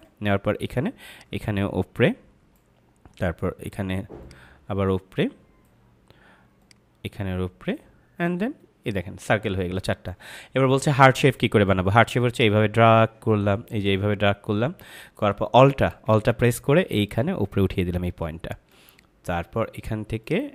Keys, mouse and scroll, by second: 12.2 click, 20.2 click.